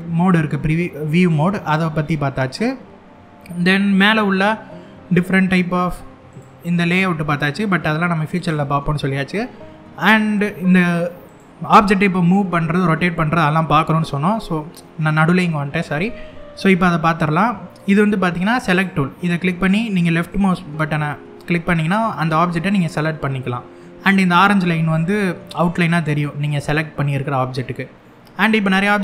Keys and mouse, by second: 8.1 click, 10.9 click, 18.3 click, 21.5 click, 22.3 click, 25.7-26.3 middle drag, 27.2-27.7 middle drag.